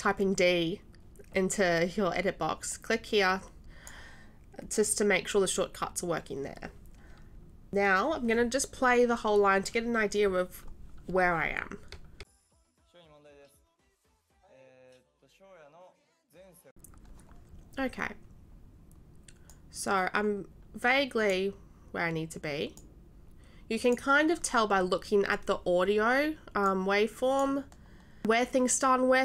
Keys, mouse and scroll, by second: 2.7-3.9 drag, 12.2 s, 19.5-21.3 drag, 22.7 click, 26.6-27.5 drag, 28.2 click.